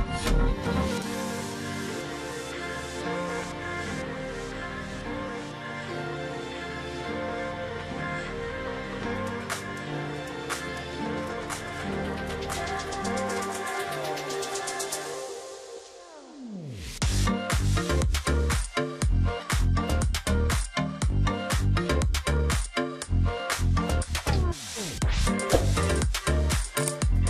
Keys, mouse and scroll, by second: 0.5 ctrl+click, 2.7 ctrl+click, 2.8 alt+scroll down 1, 3.2 space, 3.6 alt+scroll down 1, 3.7 space, 4.3-4.6 alt+scroll up 1, 5.7 ctrl+click, 6.1 alt+scroll down 1, 6.4 ctrl+click, 7.1-7.6 alt+scroll up 1, 7.8-8.4 alt+scroll up 1, 8.5 space, 10.4 alt+scroll down 1, 11.1 space, 11.5 alt+scroll down 1, 11.8 alt+scroll up 1, 12.1 alt+scroll down 1, 12.6-13.1 alt+scroll up 1, 14.5 double click, 20.3-20.8 alt+scroll up 1, 21.9 ctrl+click, 22.2 alt+scroll up 1, 22.3 space, 22.9 space, 23.2-23.7 alt+scroll up 1, 23.8 alt+scroll up 1, 24.0 space, 25.3 alt+click, 26.0 space, 26.7 space.